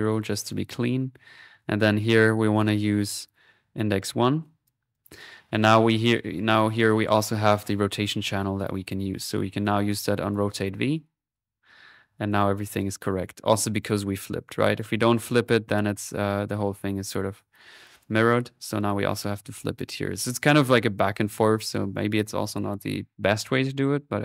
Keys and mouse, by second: 0.7 middle click, 1.0-3.2 drag, 3.7-6.2 drag, 6.2 middle click, 10.2 click, 11.3 click, 12.1 middle click, 12.3-13.6 drag, 12.8 middle click, 13.6 middle click, 13.8-14.8 drag, 14.9 middle click, 17.0 click, 17.4 middle click, 17.8 click, 19.6 click.